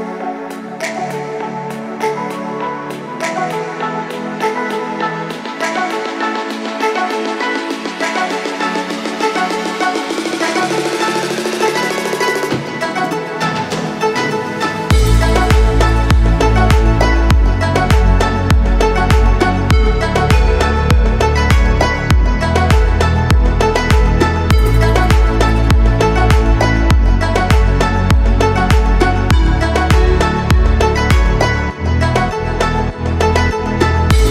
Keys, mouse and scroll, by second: 0.4 alt+shift+click, 0.7 middle click, 1.4-1.7 scroll up 2, 2.6 alt+shift+click, 3.1-4.5 right drag, 4.8 shift+middle click, 5.6-7.6 middle drag, 7.6 click, 8.7 ctrl+click, 9.2-10.2 right drag, 10.2 scroll down 1, 10.5 middle click, 11.3-11.7 scroll up 2, 11.7 shift+middle click, 12.5 middle click, 13.7 alt+click, 14.3 alt+shift+click, 14.7 middle click, 15.6 alt+shift+click, 15.9 middle click, 17.3 alt+shift+click, 18.6-19.6 right drag, 19.6 middle click, 20.4-21.2 scroll up 1, 21.2 click, 22.7 ctrl+click, 23.2 right click, 24.3-25.4 middle drag, 25.4 click, 25.7 right click, 26.6 scroll down 1, 26.9-28.3 middle drag, 28.3-28.7 scroll down 2, 28.9-31.1 middle drag.